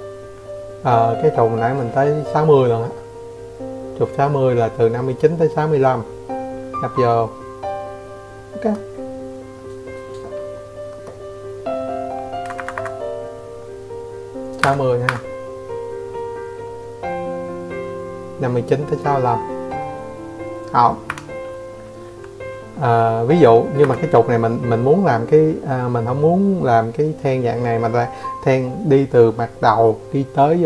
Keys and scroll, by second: 4.6 Escape, 4.8 Escape, 6.7 Escape, 7.2 Escape, 13.1 Escape, 15.9 Escape.